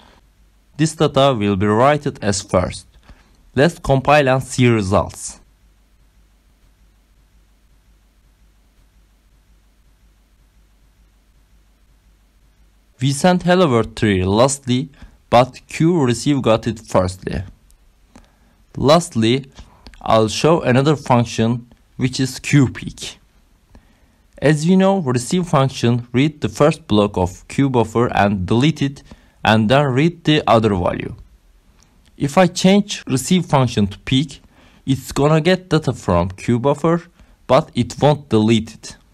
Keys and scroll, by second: 1.5 Up, 2.6 Return, 19.4 ctrl+c, 26.3 BackSpace, 29.2 shift+p, 29.7 e, 31.4 k, 33.5 ctrl+s, 35.5 Up, 35.9 Return.